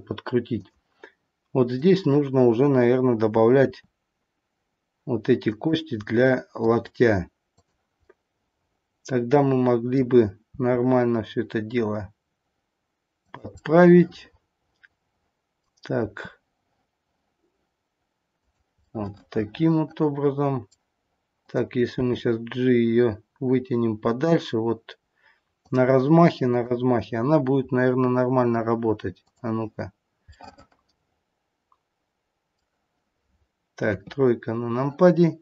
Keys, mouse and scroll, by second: 0.6 click, 1.7 click, 3.6 r, 6.0 middle click, 7.5 click, 8.7 middle click, 10.4 r, 13.5 middle click, 15.9 r, 18.7 middle click, 21.3 click, 22.6 g, 26.4 click, 27.7-29.2 scroll up 2, 29.2 click, 29.8-30.5 scroll down 4, 30.2 middle click, 30.5 middle click, 33.8 KP_3.